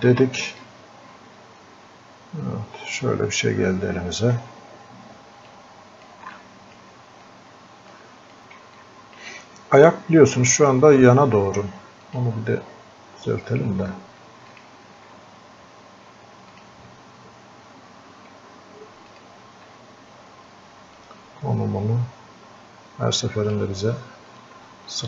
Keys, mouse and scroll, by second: 0.0 ctrl+shift+click, 0.6-3.8 drag, 3.8-4.4 scroll up 1, 5.5 click, 6.4 alt+click, 7.3 click, 8.8-11.9 alt+drag, 12.1 click, 19.1 alt+click, 21.0-24.3 drag, 24.3-25.0 drag.